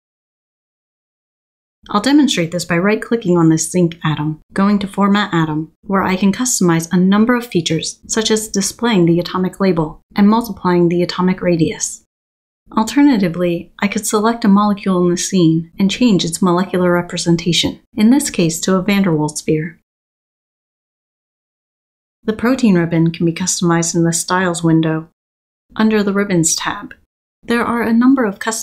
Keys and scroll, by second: 1.5 Escape, 13.0 Tab, 17.6 Escape.